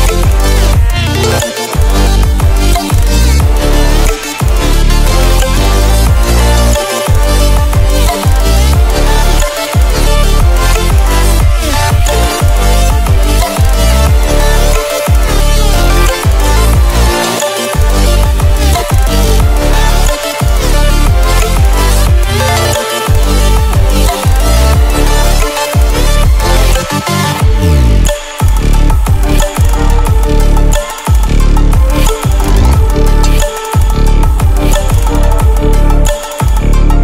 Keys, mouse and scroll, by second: 5.9 click, 8.4 click, 11.4-12.5 scroll up 1, 12.5-28.3 drag, 34.5-35.1 ctrl+scroll up 1, 35.3-35.7 ctrl+alt+scroll up 1, 35.9 ctrl+alt+scroll up 1, 36.6-37.0 click.